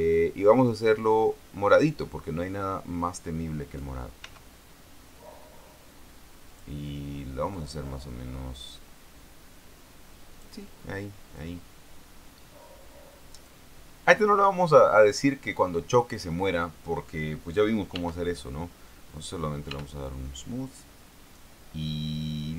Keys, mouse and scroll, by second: 1.1-2.4 drag, 4.6 s, 6.8 click, 7.9-11.0 drag, 11.7-14.0 drag, 18.3 t, 19.5 click, 20.0 t.